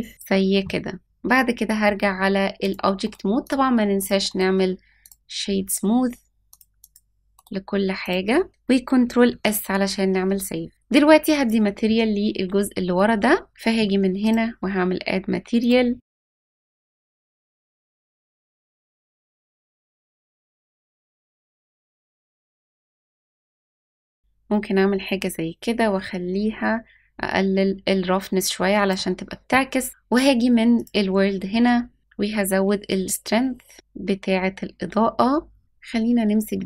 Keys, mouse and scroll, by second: 1.0 click, 2.6 click, 3.0 right click, 4.0 click, 4.2-5.1 right drag, 6.5 click, 6.8 click, 7.3 right click, 9.3 ctrl+s, 11.3 click, 14.2 click, 15.6-16.7 drag, 25.2-29.0 drag, 30.7 click, 32.0-35.6 drag.